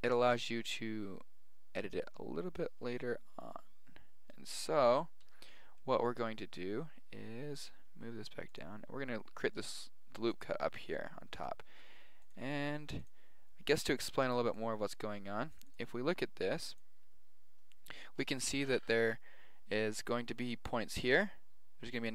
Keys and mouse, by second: 5.2 ctrl+z, 5.7-8.6 middle drag, 7.6 g, 9.6 ctrl+r, 11.6 ctrl+r.